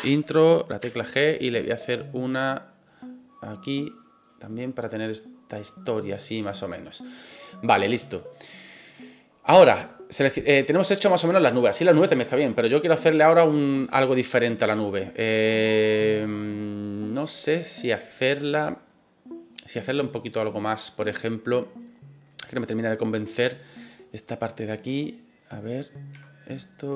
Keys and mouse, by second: 0.8 g, 3.9 click, 4.2 right click, 8.6-8.9 middle drag, 9.4 middle click, 10.1 right click, 10.7-11.1 middle drag, 11.5 middle click, 11.8 right click, 25.4 right click, 26.1 s, 26.5 click, 26.9 right click.